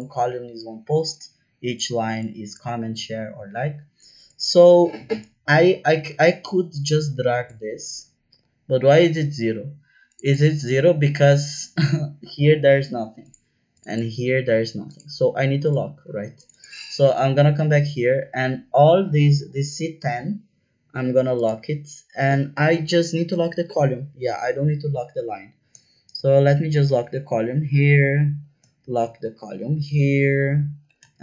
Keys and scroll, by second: 24.4 Left, 25.9 shift+4, 26.8 Right, 27.0 Right, 28.0 Left, 28.2 Left, 28.3 Left, 28.8 shift+4, 29.2 shift+Right, 29.4 shift+Right, 29.6 shift+Right, 29.8 shift+Right, 30.0 shift+Right, 30.2 shift+Right, 31.1 shift+4.